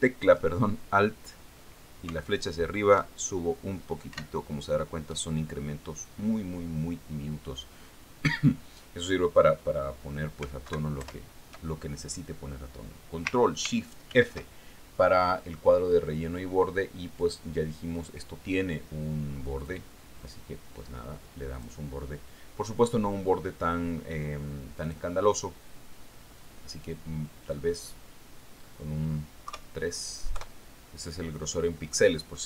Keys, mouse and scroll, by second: 4.4 alt+Up, 5.6 alt+Up, 12.2 alt+Right, 12.5 alt+Left, 15.6 ctrl+shift+f, 18.7 click, 21.1 click, 23.0 click, 26.3 click, 29.3 click, 31.0 KP_3, 31.8 KP_Enter.